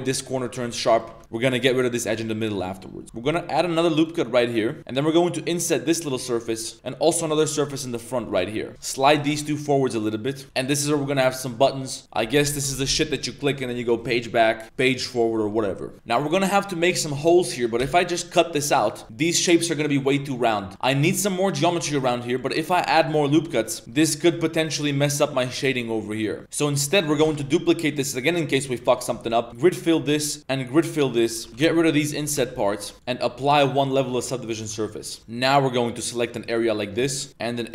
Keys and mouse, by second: 0.9 click, 1.1 z, 1.2 click, 1.3 Tab, 1.6 2, 3.0 ctrl+z, 3.6 ctrl+r, 4.8 i, 6.7 i, 7.1 i, 8.7 ctrl+z, 8.7 shift+click, 8.7 g, 8.9 shift+click, 9.1 g, 10.8 Tab, 10.8 3, 15.9 Tab, 16.5 click, 17.1 click, 17.8 x, 18.6 Tab, 18.8 click, 20.2 Tab, 21.0 ctrl+r, 22.0 ctrl+r, 22.9 drag, 23.2 shift+middle drag, 23.3 Tab, 23.5 click, 23.8 shift+middle drag, 23.8 a, 24.0-24.4 middle drag, 24.6 middle click, 25.2 middle click, 25.7-26.4 middle drag, 26.4 ctrl+z, 26.4 Tab, 26.4 ctrl+s, 26.8 click, 27.2 shift+d, 28.9 click, 30.1 alt+click, 30.4 click, 31.3 2, 31.5 ctrl+z, 31.5 g, 32.1 a, 32.3 shift+w, 32.9 Tab, 32.9 ctrl+z, 33.0-33.4 drag, 34.0 ctrl+a, 34.4 click, 34.5 Tab, 34.8 middle click, 35.2 3, 36.4 ctrl+shift+click, 37.6 shift+click.